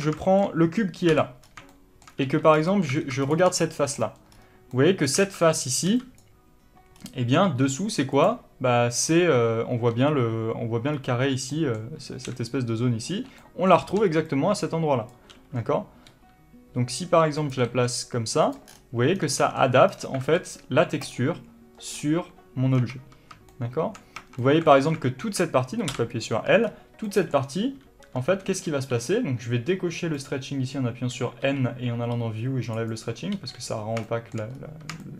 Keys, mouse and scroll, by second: 0.5-3.6 shift+middle drag, 1.5 l, 1.8 scroll up 1, 2.6 3, 2.9-3.3 scroll up 1, 3.3 alt+a, 3.6 click, 4.0-12.7 shift+middle drag, 5.6 alt+a, 12.7-13.7 drag, 13.4 d, 13.7 middle click, 14.6-17.8 drag, 15.4 d, 18.0 s, 18.9 click, 19.5 scroll down 1, 19.7-21.5 middle drag, 20.2 scroll down 1, 20.6 alt+a, 21.5 click, 23.1 scroll down 1, 23.2 Tab, 23.8-35.1 shift+middle drag, 24.5 Tab, 25.1 alt+a.